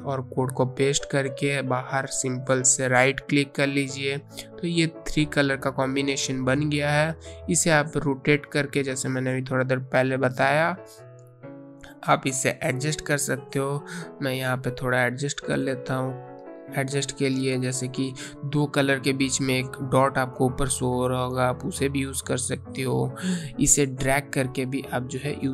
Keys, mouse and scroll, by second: 3.7 click, 6.3 click, 11.0 click, 24.9 ctrl+z.